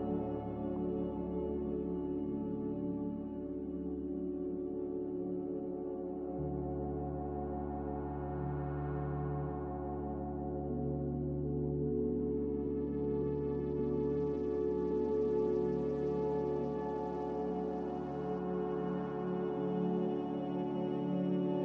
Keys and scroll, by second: 9.1-9.9 typing, 11.9 ctrl+z, 12.1-12.9 typing, 14.8-15.6 typing, 16.9 typing, 17.5 Return, 21.3-21.6 typing.